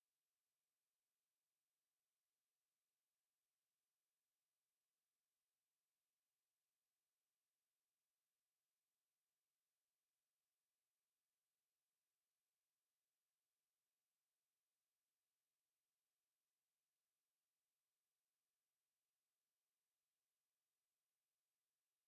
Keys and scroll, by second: 16.9 5, 19.1 5.